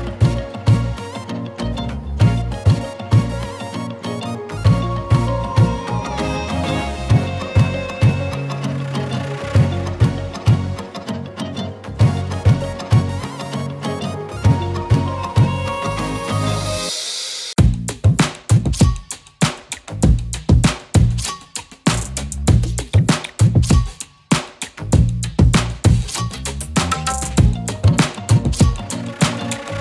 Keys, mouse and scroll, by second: 0.7 z, 0.8-1.5 click, 1.2 z, 1.3 z, 1.5 z, 2.2 click, 2.6 scroll up 1, 2.9 z, 3.7 click, 5.2 z, 6.0 click, 6.4 z, 6.5 click, 16.8 click, 18.9-22.3 typing, 19.3 click, 20.4 click, 20.8-21.7 click, 22.1 click, 22.4 click, 23.4 right click, 23.8 click.